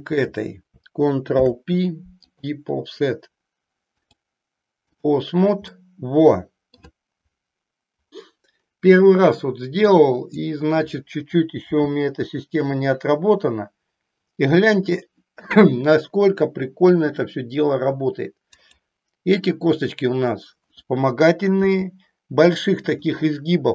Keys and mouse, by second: 1.4 ctrl+p, 4.1 click, 5.7-6.8 middle drag, 9.9 click, 11.7 g, 18.7 click, 21.7 g.